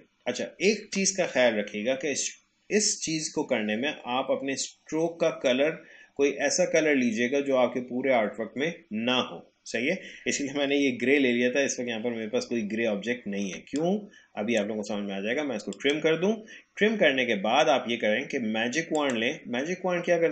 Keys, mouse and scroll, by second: 11.3-11.8 alt+scroll down 1, 12.7 alt+scroll up 1, 13.6 space, 13.8 click, 14.0 space, 15.7 click, 18.9 click.